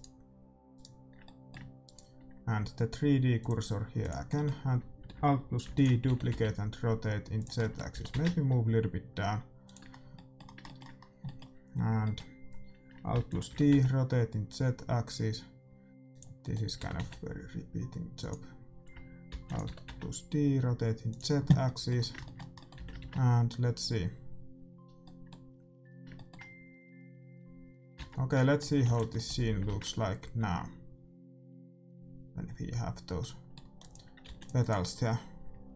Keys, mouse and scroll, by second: 1.2-3.1 middle drag, 3.3-5.6 drag, 4.3-5.6 middle drag, 5.6 alt+d, 6.0 r, 7.5-9.2 middle drag, 7.9 g, 9.9-11.0 middle drag, 13.1 alt+d, 13.4 r, 16.5-18.1 middle drag, 16.7 r, 19.3 alt+d, 19.6 r, 21.5-24.5 middle drag, 22.7 a, 25.1 middle click, 27.9 alt+a, 28.8 ctrl+s, 31.0 shift+z, 33.2 middle click, 33.9-35.7 drag, 34.3 ctrl+s, 34.3 middle click.